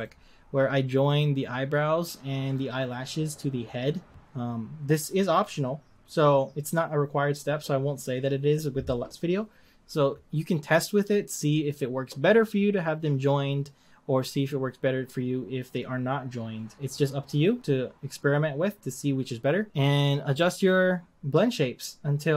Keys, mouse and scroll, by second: 1.2 click.